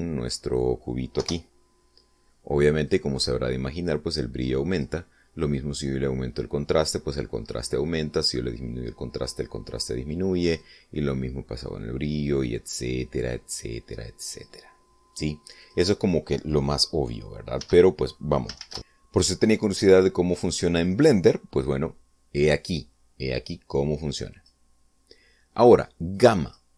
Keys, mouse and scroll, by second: 0.1-1.7 middle drag, 1.9 0, 3.6-5.7 drag, 6.3-10.8 drag, 11.3-15.3 drag, 16.3 click, 18.3 x, 25.1 click.